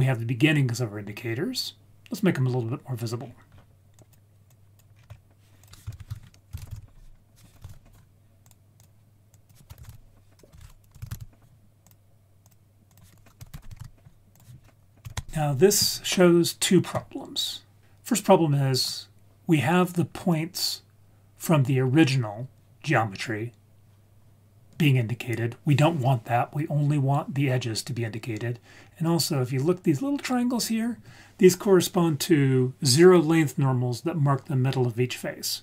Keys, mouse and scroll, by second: 2.3-3.1 scroll down 1, 3.1-3.9 scroll down 4, 3.9 click, 4.5 click, 4.9-5.6 scroll up 3, 5.6 click, 5.6 scroll up 1, 5.9 shift+a, 9.3-11.9 drag, 10.6 BackSpace, 12.5-13.8 drag, 14.3 click, 17.8 ctrl+s, 18.0 scroll down 2, 18.1 scroll up 1, 28.9-29.8 scroll up 4.